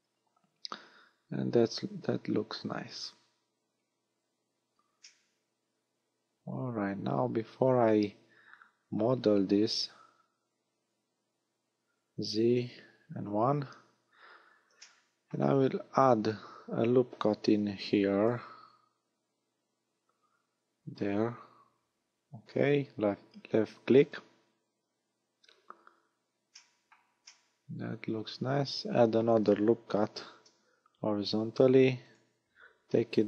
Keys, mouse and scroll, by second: 5.0 middle click, 12.6 z, 13.1 KP_1, 14.0-14.4 scroll up 2, 14.8 shift+middle click, 16.5 a, 17.4 ctrl+r, 24.1 click, 26.6 shift+middle click, 27.2 middle click, 30.2 ctrl+r.